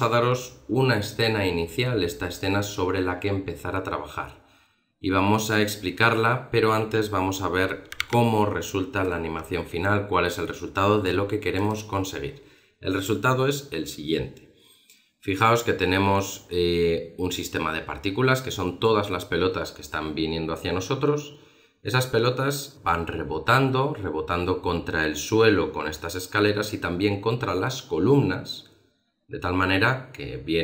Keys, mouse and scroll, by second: 0.6-2.6 scroll down 1.